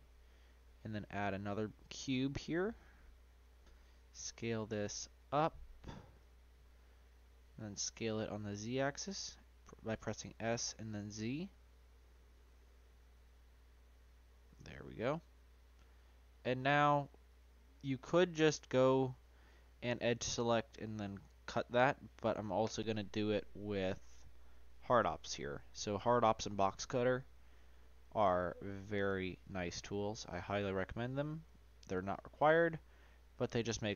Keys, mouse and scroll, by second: 0.4-2.4 drag, 2.4-4.0 middle drag, 4.0 s, 7.3-9.1 middle drag, 9.1 s, 14.9-17.2 middle drag, 17.2 click, 18.7 click, 24.4-25.6 drag.